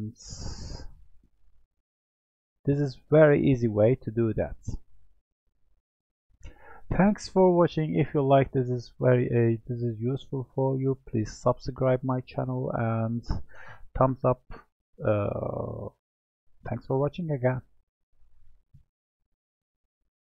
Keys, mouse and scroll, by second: 1.6 Tab, 2.0-2.8 middle drag, 2.8 click, 3.7-6.8 middle drag.